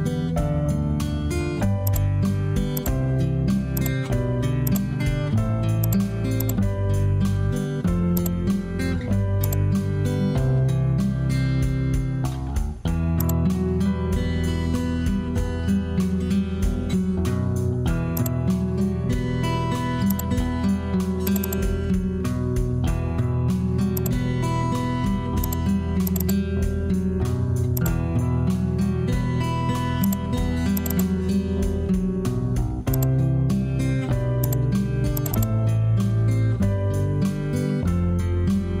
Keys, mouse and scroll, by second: 0.4 Escape, 9.3-12.3 drag, 12.3 Return, 36.5 Escape.